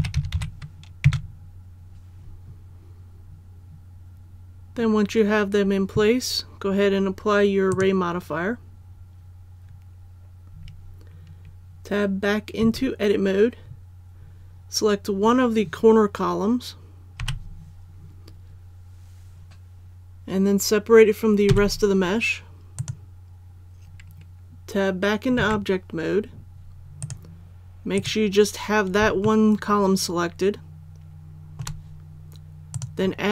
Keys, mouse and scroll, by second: 0.0 KP_2, 0.1 KP_Decimal, 0.3 KP_1, 7.7 click, 12.6 Tab, 17.2 l, 21.5 p, 22.8 click, 25.4 Tab, 27.0 right click, 29.2-31.6 shift+middle drag, 32.7 click.